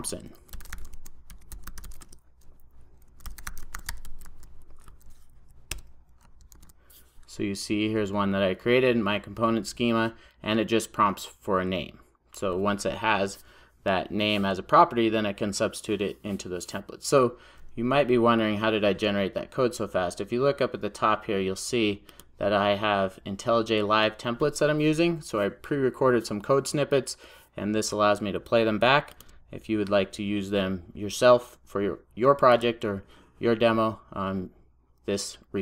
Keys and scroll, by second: 5.8 Return, 6.6 super+s.